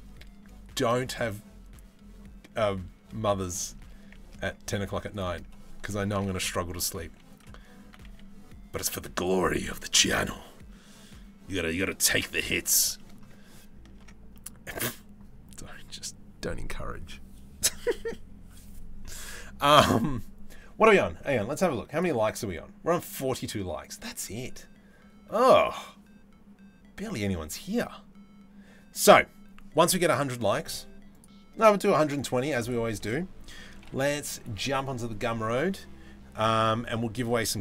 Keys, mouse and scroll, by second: 3.2 shift+middle click, 4.1 Tab, 4.5 3, 4.7 click, 5.8 ctrl+l, 6.3 s, 7.5 s, 12.6 middle click, 13.7 Tab, 14.0 middle click.